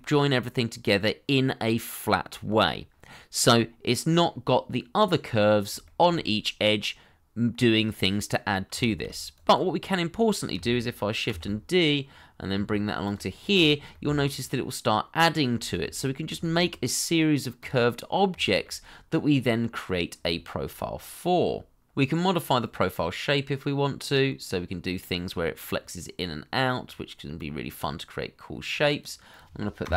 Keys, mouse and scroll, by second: 3.1 middle click, 5.8 shift+middle click, 6.2 middle click, 8.8 shift+middle click, 9.8 middle click, 11.2 shift+d, 12.5 y, 14.2 middle click, 15.5-16.0 shift+scroll down 1, 16.1 scroll down 1, 16.4 shift+middle click, 18.4 shift+middle click, 20.1-20.7 scroll down 1, 25.1-25.6 scroll down 1, 25.6 middle click.